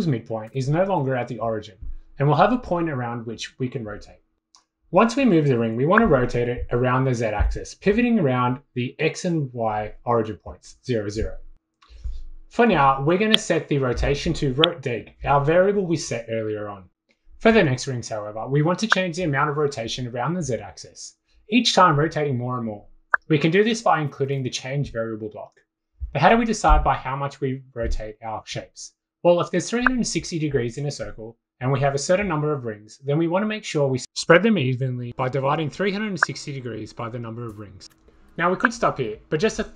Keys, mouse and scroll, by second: 0.0-1.7 typing, 1.8 click, 5.7 click, 8.0 click, 9.1 click, 12.2 click, 13.2 click, 14.5 click, 15.4 click, 18.3 click, 21.7 click, 22.2 click, 22.4-23.4 typing, 24.1 click, 24.8 click, 27.0 click, 27.9 click, 32.2 click, 34.1 click, 34.4 click, 34.8 click, 34.9 click, 36.4 click, 37.3 click, 38.1 ctrl+c, 38.3 ctrl+v.